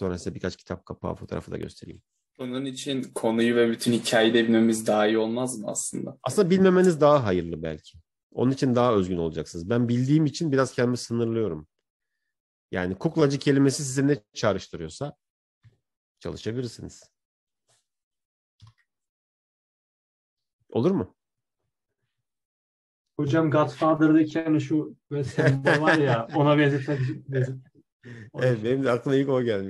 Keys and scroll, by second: 7.7 Return, 18.7 ctrl+j.